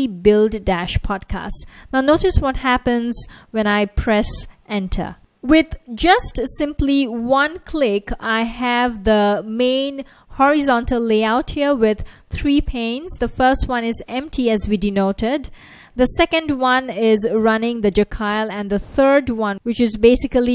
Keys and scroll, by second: 9.5 F1, 13.4 F1, 17.0 F1, 17.6 F1, 18.0 F1, 20.2 F1.